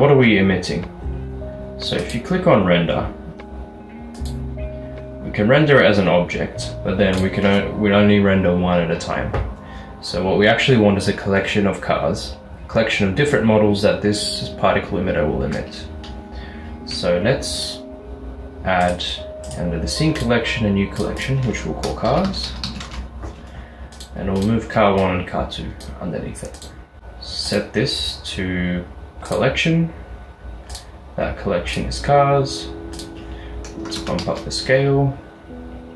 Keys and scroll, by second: 22.1-22.7 typing, 23.1 Return, 26.7-27.5 typing, 33.9 typing, 34.7 Return.